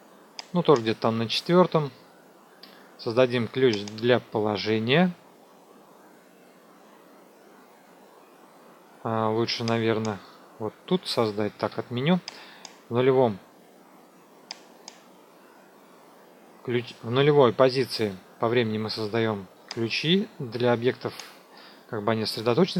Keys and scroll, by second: 11.5 ctrl+z.